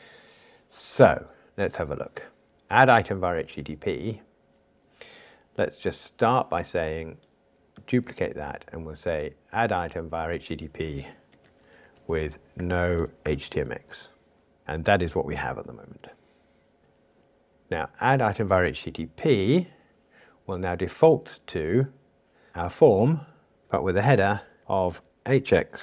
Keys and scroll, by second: 7.8 super+d.